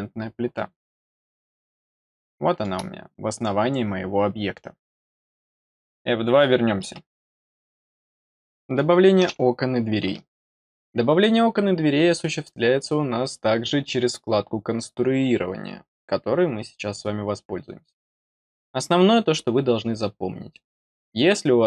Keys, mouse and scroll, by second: 0.1-0.4 scroll up 1, 1.1-2.6 middle drag, 2.9-3.8 scroll up 8.